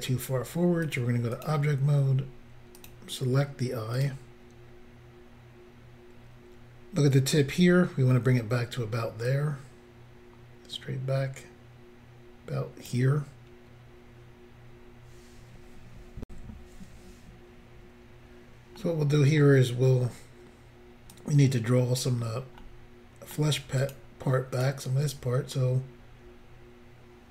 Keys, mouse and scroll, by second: 0.8 click, 0.9 click, 1.3 click, 1.4 double click, 2.8 double click, 2.8 double click, 3.9 click, 4.0 click, 9.3 click, 16.3 Insert, 18.8 middle click, 21.1 click, 22.6 middle click, 23.8 click, 24.6 click.